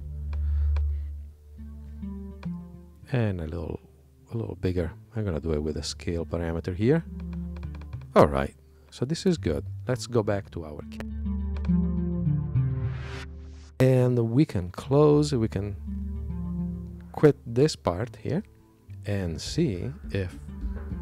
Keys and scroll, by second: 12.6 super+Tab, 18.2 super+q.